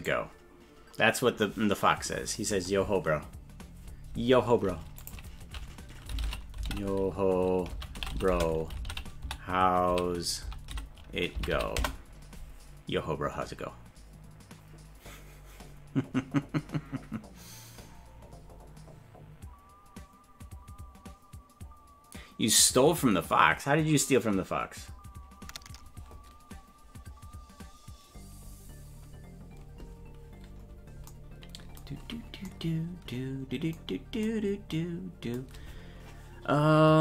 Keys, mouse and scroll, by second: 0.0 right click.